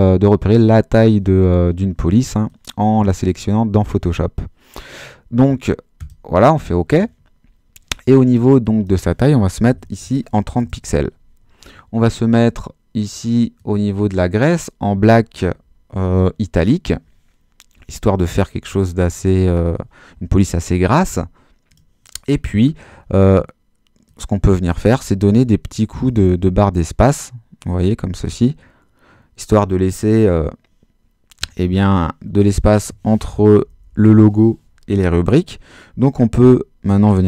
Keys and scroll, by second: 9.7 3, 9.9 0, 10.5 Return, 25.0 space, 33.4 BackSpace, 36.3-37.2 typing.